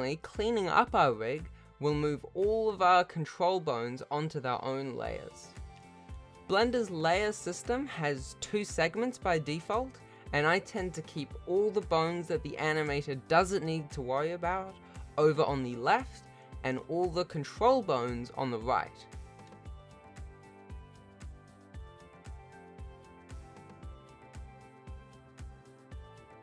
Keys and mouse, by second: 0.0 alt+a, 1.1 click, 1.5 click, 2.9 click, 4.0-5.0 shift+drag, 5.3 m, 5.8 click, 6.0 shift+middle click, 7.1 shift+middle click, 7.5 m, 7.9 alt+a, 8.0 ctrl+s, 8.4 shift+click, 8.5 alt+a, 8.6 shift+click, 9.0 shift+click, 10.3 F3, 12.3 m, 13.2 ctrl+s, 13.3 ctrl+s, 14.0 click, 14.2-14.7 drag, 14.9 g, 15.1 shift+click, 16.1 g, 16.3 m, 17.4 r, 18.1 click, 18.4 shift+middle click, 18.5 ctrl+s, 18.7 click, 18.7 r, 18.9 ctrl+s, 19.9 shift+middle click, 20.1 click, 20.6 shift+middle click, 21.4 m, 22.7-23.1 drag, 23.1 a, 23.2 c, 23.4 m, 24.3 ctrl+s, 24.7 n, 24.7 m, 24.9 m, 25.7 ctrl+s, 25.9 alt+a, 26.0 ctrl+s, 26.2 ctrl+s.